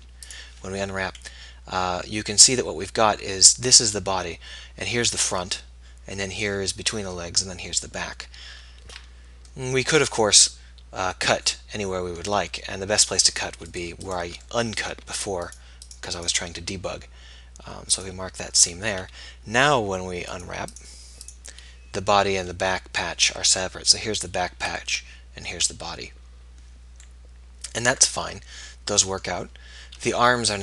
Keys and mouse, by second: 9.9-13.2 middle drag, 13.8-16.6 middle drag, 18.7 a, 19.2 a, 29.3-30.4 middle drag.